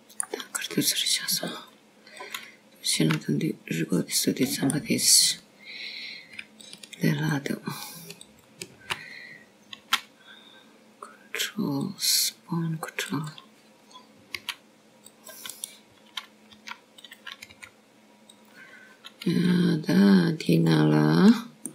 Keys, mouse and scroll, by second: 0.6-1.2 scroll down 2, 1.2 middle click, 3.6-4.1 scroll up 2, 4.3 click, 5.9 click, 5.9 g, 7.1 middle click, 7.9 click, 9.5 alt+click, 10.2 click, 11.1 alt+click, 12.6 s, 15.9 click, 17.3 c, 19.5 r, 20.4 g.